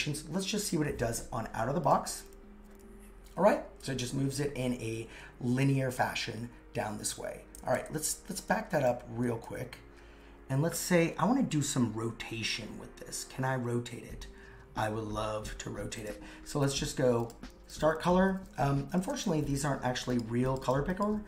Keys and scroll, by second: 7.1 super+z, 7.6 super+z, 9.3 super+z.